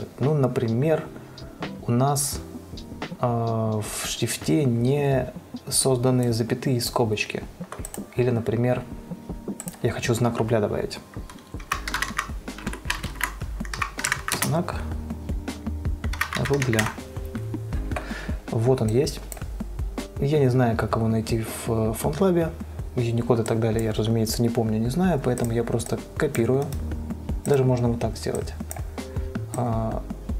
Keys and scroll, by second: 11.8-15.1 typing, 13.1 ctrl+a, 16.3-17.5 typing.